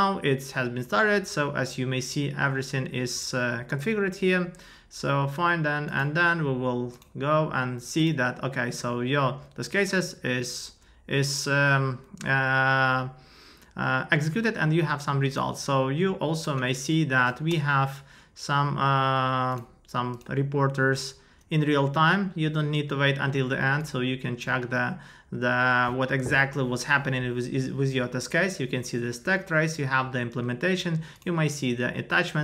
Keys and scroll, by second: 17.1 Up, 17.5 Return.